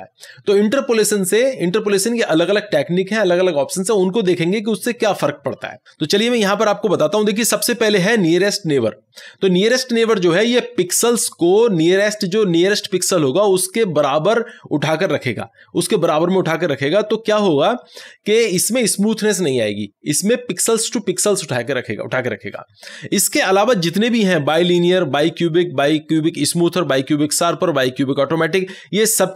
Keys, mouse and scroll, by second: 6.5 click.